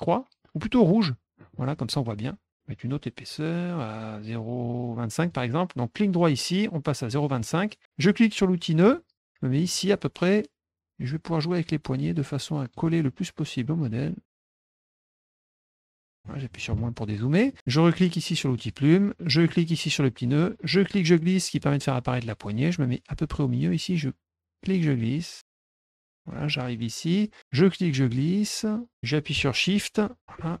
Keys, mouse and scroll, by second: 1.4 middle click, 3.3 right click, 5.2 click, 6.1 right click, 7.1 click, 8.8 click, 9.6 click, 11.1-12.7 drag, 13.6-14.7 drag, 15.0 click, 15.7 click, 16.1 middle click, 17.2 middle click, 18.5 click, 20.3-21.5 drag, 24.6-26.2 drag, 27.4-30.2 drag.